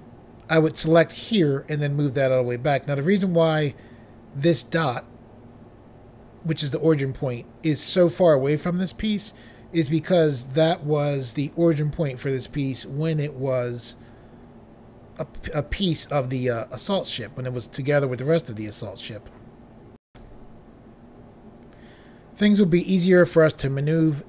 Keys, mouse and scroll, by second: 20.1 Pause.